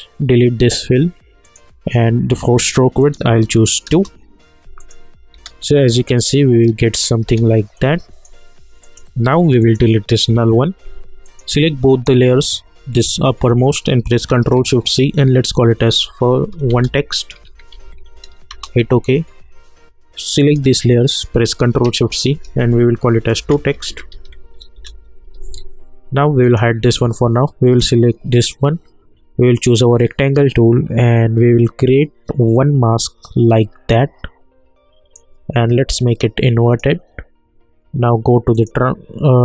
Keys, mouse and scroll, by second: 1.4 click, 3.8 Return, 4.8 click, 5.3 space, 7.2 space, 7.7 click, 11.9 shift+click, 14.8 ctrl+shift+c, 15.4 1, 16.7-18.3 typing, 18.5 Return, 20.3 click, 22.0 ctrl+shift+c, 23.2-24.7 typing, 24.7 Return, 26.4-36.7 drag.